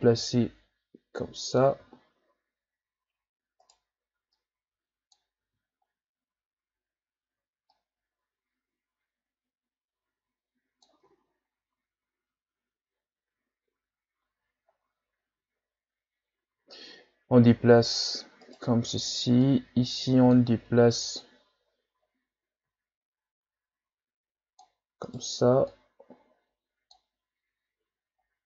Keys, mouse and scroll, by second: 1.8 ctrl+z, 3.6 right click, 4.3-5.4 drag, 5.4 ctrl+z, 7.7-10.7 drag, 11.0 Tab, 11.5-11.9 scroll down 3, 12.8-13.2 scroll down 2, 14.7-15.7 shift+scroll up 1, 15.7-17.3 scroll up 6, 17.4 Tab, 18.4 right click, 19.4-20.5 drag, 20.5 ctrl+z, 21.2-25.1 drag, 25.1 right click, 25.7-28.4 drag.